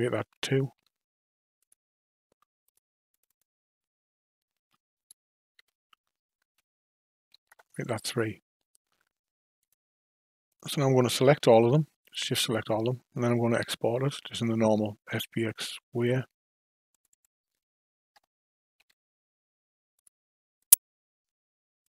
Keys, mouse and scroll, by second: 2.6 click, 3.1 click, 3.3-6.4 drag, 9.6 click, 10.5 click, 12.0 shift+click, 13.8 ctrl+alt+shift+q.